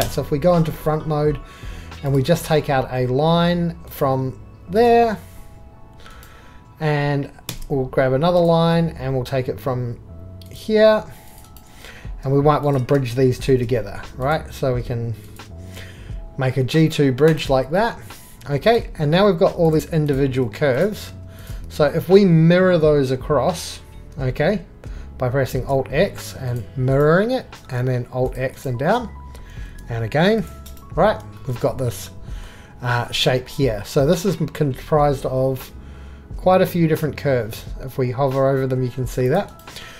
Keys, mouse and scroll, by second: 6.9 right click, 7.5 shift+a, 8.4 click, 13.4 shift+b, 18.7-19.6 drag, 19.7-20.1 drag, 25.6 alt+x, 27.6 alt+x, 29.6 alt+x.